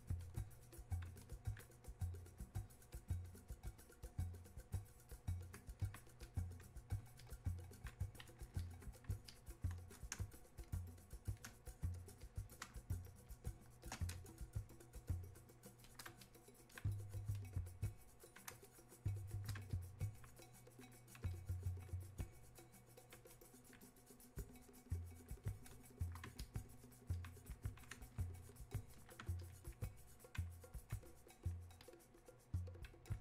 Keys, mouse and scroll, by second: 10.2 space, 12.3 click, 12.8 space, 14.4-29.4 shift+drag.